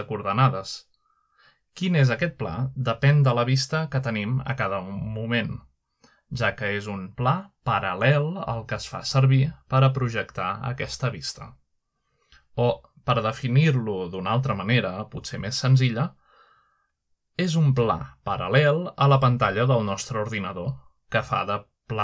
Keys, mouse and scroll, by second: 5.4-6.5 middle drag, 6.5 middle drag, 6.9 middle click, 7.1 g, 12.5-13.3 right drag, 13.1-14.5 middle drag, 14.8 middle click, 15.1 g, 18.2-18.7 right drag, 18.7-19.7 middle drag.